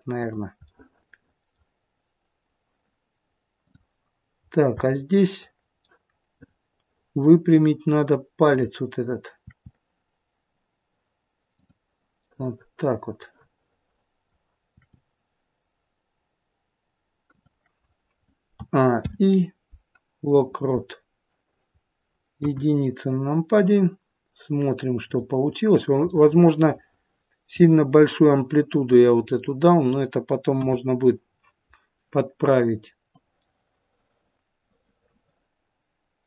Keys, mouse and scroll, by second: 0.6 middle click, 3.6 click, 4.3-5.7 scroll up 2, 4.7 middle click, 5.7 middle click, 7.5-7.9 scroll up 1, 8.4 click, 9.3 r, 12.1 middle click, 14.7 r, 18.4 a, 18.9 i, 22.3 KP_1, 22.9-25.0 scroll down 3, 25.0 click, 26.0 middle click, 29.3 middle click, 30.5 KP_1, 33.1 click.